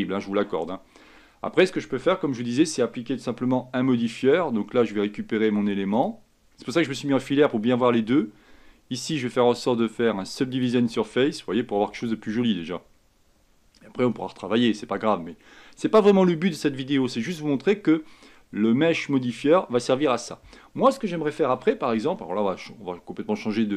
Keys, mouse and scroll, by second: 0.1-3.7 scroll down 2, 4.0 Tab, 6.0 click, 9.1-12.2 drag, 16.3 scroll down 2, 17.0-17.5 scroll down 1, 17.5-19.8 scroll up 2, 20.3-21.7 scroll down 1, 21.7 a, 22.8-23.2 scroll down 1, 23.2-23.7 scroll up 1.